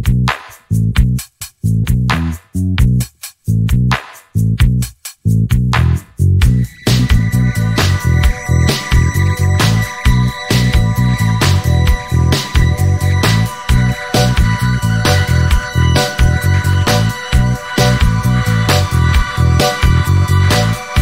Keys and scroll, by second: 0.2 alt+a, 10.0 Escape, 13.4 shift+d, 13.7 y, 16.1 shift+a, 20.1 h.